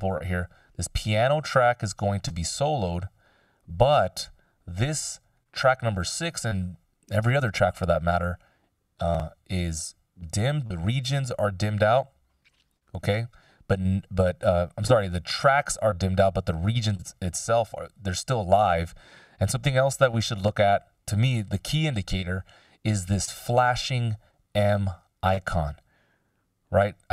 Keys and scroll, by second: 21.8 ctrl+alt+super+m.